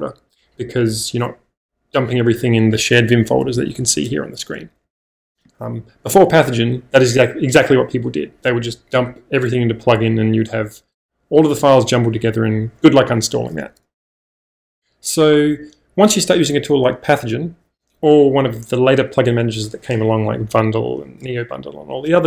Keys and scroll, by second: 3.4 k, 3.6 k, 3.7 k, 4.8 k.